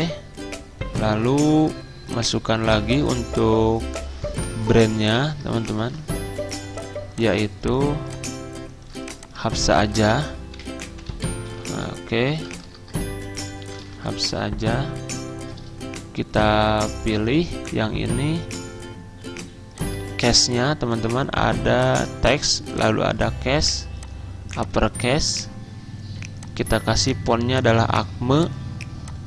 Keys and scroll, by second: 0.9-1.6 typing, 5.1 z, 5.9 ctrl+z, 9.6 ctrl+a, 10.4-13.4 typing, 16.0-16.7 typing, 19.6-20.4 typing.